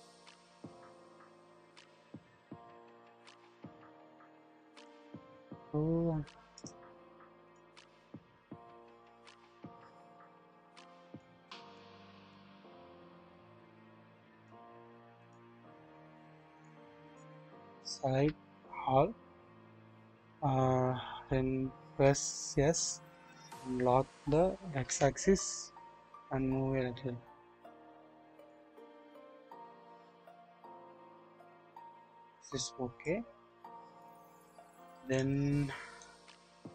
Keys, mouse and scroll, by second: 1.8-4.8 drag, 8.7-11.2 drag, 12.3-14.5 drag, 15.2 click, 16.6-17.2 drag, 18.1 typing, 22.0 typing, 25.0 typing, 28.8 double click, 29.2-30.1 scroll down 1, 30.1-33.0 drag, 34.3-34.8 drag, 35.0 double click, 36.0-36.7 drag.